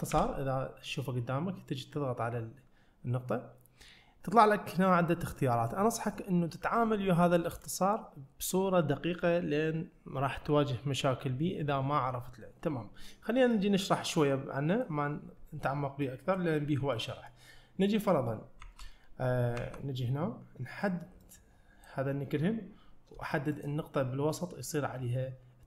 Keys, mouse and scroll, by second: 16.1-16.4 middle drag, 16.7-17.0 scroll down 1, 17.0-17.3 middle drag, 17.9 middle click, 18.7 `, 19.6 `, 20.2-21.3 scroll up 1, 21.3-21.9 drag, 23.6 shift+click.